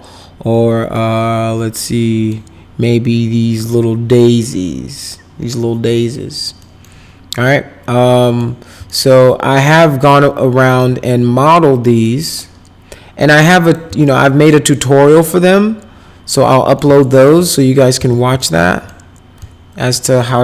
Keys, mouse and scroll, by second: 0.9-2.3 middle drag, 4.4-6.1 middle drag, 6.6 middle click, 8.2 middle click, 8.9-10.8 alt+middle drag, 11.8 middle click, 13.3 click, 14.0-16.3 alt+middle drag, 16.5 middle click, 17.0 alt+middle click, 17.7 click, 18.0 z, 18.4 alt+middle click, 19.4 alt+middle click.